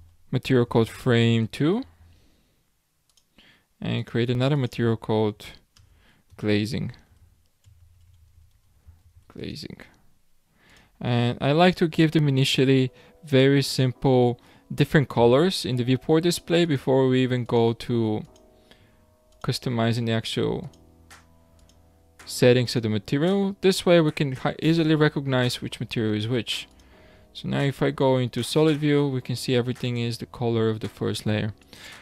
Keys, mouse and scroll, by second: 3.1-7.6 drag, 7.8 BackSpace, 7.9 BackSpace, 8.2 BackSpace, 8.3 BackSpace, 10.7 click, 11.6-16.3 drag, 16.6 click, 18.2 click, 19.3 click, 21.5 click, 22.6 click, 26.7 click, 27.3 scroll up 2, 29.8 click, 31.6 click.